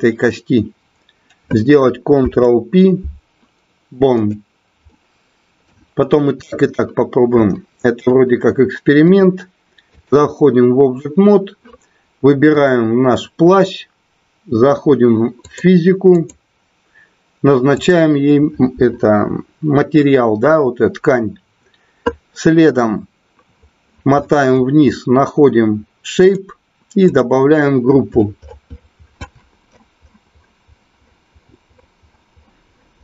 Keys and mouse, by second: 2.0 ctrl+p, 4.8-5.6 middle drag, 7.4-8.0 shift+middle drag, 9.0 click, 17.6 click, 26.3 click, 27.2-33.0 drag.